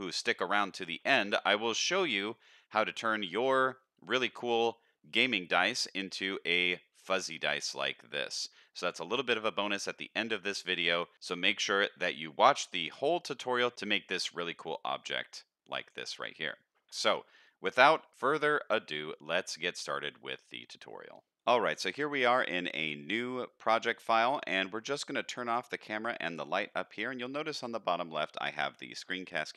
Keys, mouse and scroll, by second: 0.2 click, 1.1 alt+a, 1.3-2.1 middle drag, 2.3-2.7 shift+middle drag, 3.0-3.4 middle drag, 3.8-4.1 middle drag, 5.8-6.3 middle drag, 7.0-8.7 middle drag, 9.1-9.6 middle drag, 10.5-11.0 middle drag, 11.2-11.8 middle drag, 12.1-12.4 shift+middle drag, 12.8-13.6 middle drag, 13.7 z, 14.2-14.5 middle drag, 15.1-15.4 middle drag, 16.1 middle click, 17.1 middle click, 18.1-18.6 middle drag, 18.9-20.4 middle drag, 21.1 z, 25.5 click, 26.4 click.